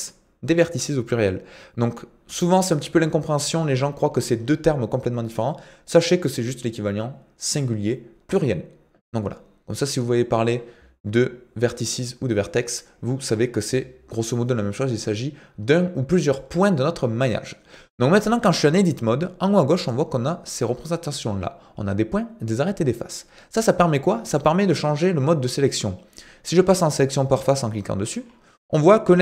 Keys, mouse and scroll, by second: 24.6 click.